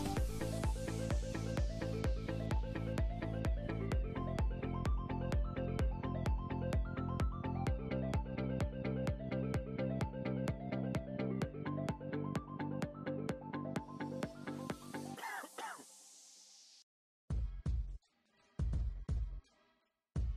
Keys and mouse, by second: 0.2 Tab, 1.7 click, 2.2 ctrl+z, 2.5 ctrl+z, 2.5 Tab, 2.7 KP_1, 3.6 Tab, 5.3 z, 5.5 click, 6.5 click, 6.9 Tab, 7.1 KP_1, 7.3 z, 8.6 z, 9.1 Tab, 9.5 KP_5, 10.3 ctrl+r, 10.7 ctrl+r, 11.0 ctrl+r, 11.5 click, 13.7 Tab, 14.7 KP_1, 15.1 z.